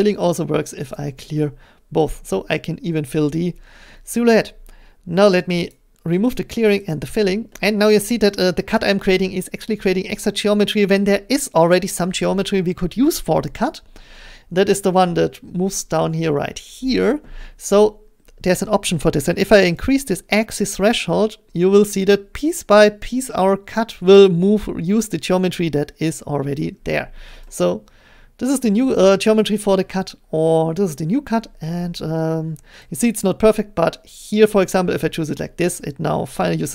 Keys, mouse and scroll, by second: 0.9 click, 3.8 middle click, 4.3 scroll, 6.1 click, 6.3 scroll, 6.9 click, 7.9 scroll, 8.7 middle click, 8.9 scroll, 26.5 click, 27.9 click, 29.5-31.2 drag, 31.2-34.1 middle drag, 31.2-31.6 scroll, 34.1-36.7 drag.